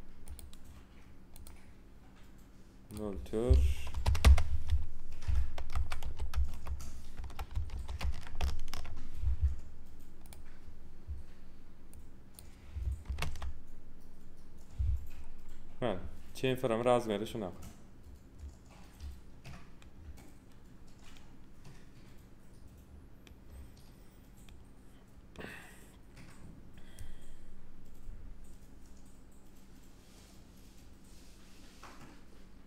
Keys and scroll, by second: 3.9 BackSpace, 4.0 4, 4.2 Return, 5.5 0, 6.3 Return, 7.1 0, 8.3 Return, 13.0 2, 13.1 Return.